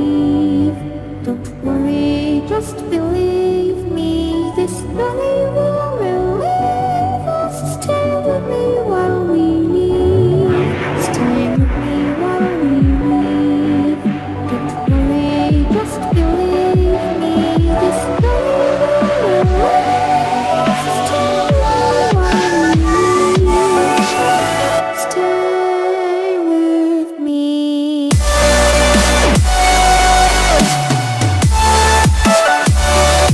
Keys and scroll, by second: 32.4 ctrl+e.